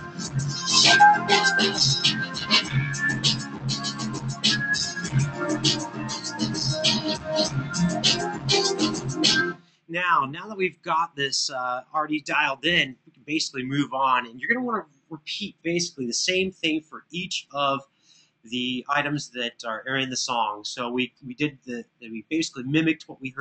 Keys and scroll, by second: 0.4 super+=, 9.2 space, 12.1 super+=.